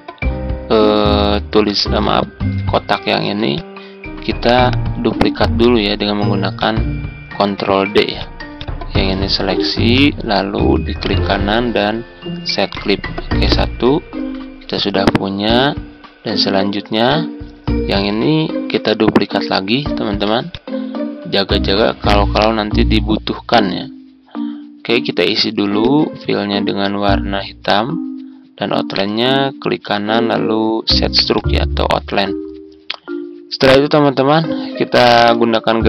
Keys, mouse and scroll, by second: 3.0 ctrl+d, 3.5-10.2 drag, 10.4 ctrl+scroll up 1, 10.9 right click, 12.7 click, 15.0 ctrl+scroll down 1, 15.9-17.0 ctrl+scroll up 1, 17.0 click, 19.9 ctrl+d, 20.4-22.6 drag, 28.9 right click, 31.5-35.8 drag.